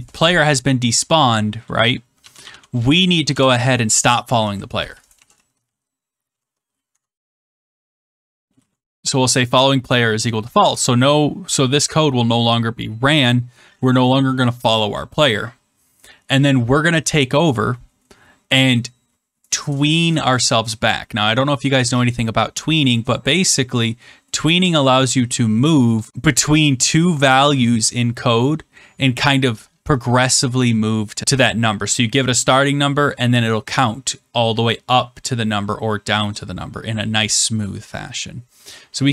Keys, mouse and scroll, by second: 1.9-9.0 typing, 10.5 Return, 24.5 click, 26.1 click.